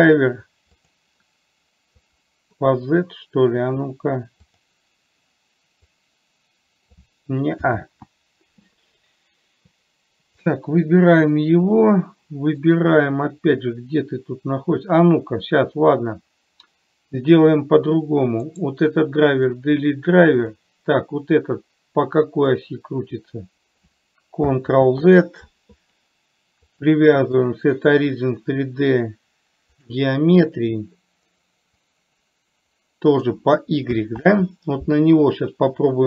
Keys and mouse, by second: 6.3-7.3 drag, 8.2 ctrl+z, 22.9-24.3 drag, 25.2 ctrl+z, 27.2-30.3 drag, 32.3-33.7 drag, 34.5 ctrl+z.